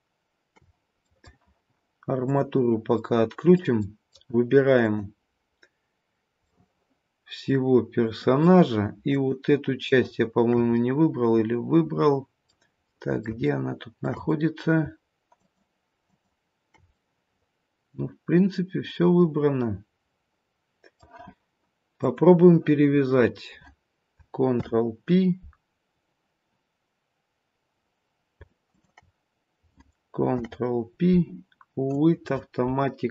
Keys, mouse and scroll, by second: 1.0 middle click, 2.2 click, 2.9 middle click, 3.7 middle click, 4.7 click, 6.4 middle click, 9.0 shift+click, 9.8 shift+click, 10.7 middle click, 12.8 middle click, 13.3 shift+middle click, 14.0 shift+middle click, 14.2 middle click, 15.2 shift+click, 16.0 shift+click, 16.9 middle click, 21.9 click, 23.0-24.0 scroll down 1, 24.4 ctrl+p, 27.5-28.3 scroll down 1, 28.6 shift+click, 30.3 ctrl+p.